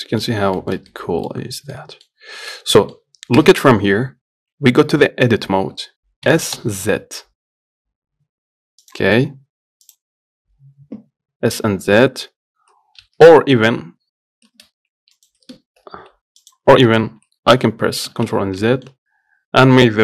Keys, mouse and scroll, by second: 0.0 scroll down 3, 0.3 middle click, 0.5-0.8 scroll up 1, 0.8 shift+middle click, 1.6 scroll up 1, 2.0 middle click, 2.4 scroll up 1, 2.6 shift+middle click, 2.8 scroll down 1, 3.1 middle click, 3.6 KP_1, 4.6 Tab, 5.5-6.6 scroll up 1, 6.6 s, 16.7 click, 17.9 ctrl+z, 18.4 ctrl+z, 18.9 middle click, 19.2 Tab, 19.3 scroll down 1.